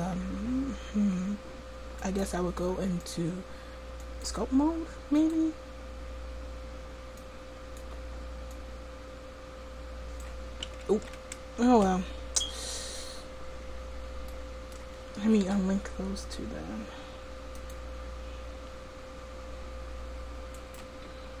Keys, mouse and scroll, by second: 3.8-7.8 drag, 8.6-10.9 drag, 10.9 ctrl+z, 11.7 Tab, 15.4 p, 18.6 Tab, 19.5 click.